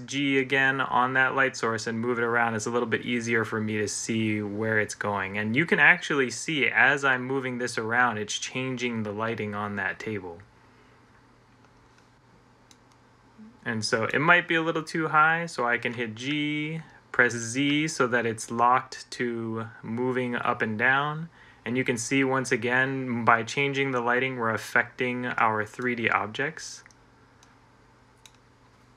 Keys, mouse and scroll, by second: 0.3 g, 15.7 g, 17.3 g, 19.1 z.